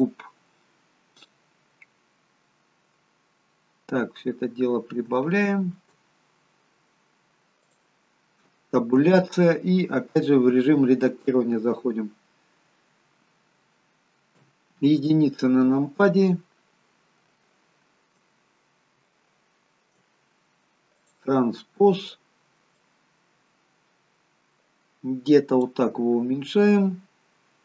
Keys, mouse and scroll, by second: 3.5-4.2 scroll up 3, 4.2-5.1 scroll up 6, 5.1 scroll up 1, 5.2 shift+middle click, 6.1-7.2 scroll up 2, 7.2-7.7 scroll up 1, 7.7 click, 9.1 Tab, 14.4 KP_1, 16.5-17.5 scroll down 7, 17.5 shift+middle click, 18.4-19.0 scroll up 7, 19.1 shift+middle click, 21.0 click, 22.8 click, 26.0-26.7 scroll up 5, 26.7-27.6 scroll down 1.